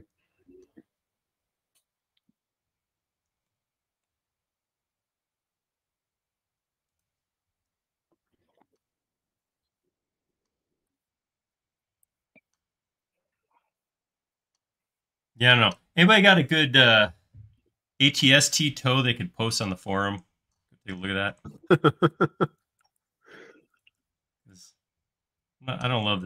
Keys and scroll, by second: 7.5 space.